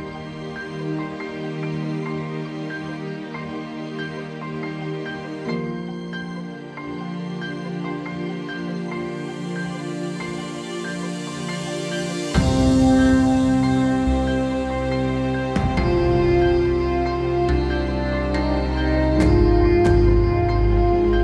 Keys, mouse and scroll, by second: 0.0 middle click, 2.0 middle click, 2.5 middle click, 3.0 middle click, 5.1 KP_1, 5.2 KP_2, 5.2 Return, 6.8 KP_1, 7.0 Return, 7.6 middle click, 9.2 middle click, 11.0 middle click, 12.0 alt+middle click, 13.0 middle click, 16.9 middle click.